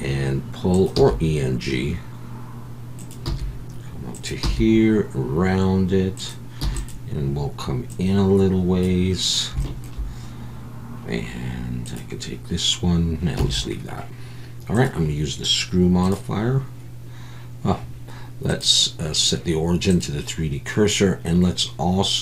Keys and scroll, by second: 0.7 e, 0.9 e, 3.2 e, 4.4 e, 6.6 e, 13.4 Tab.